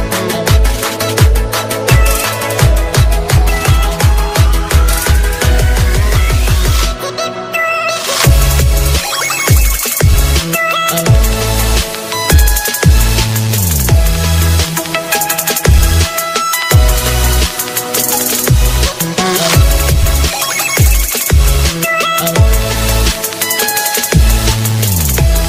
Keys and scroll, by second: 1.4 alt+space, 3.4 ctrl+space.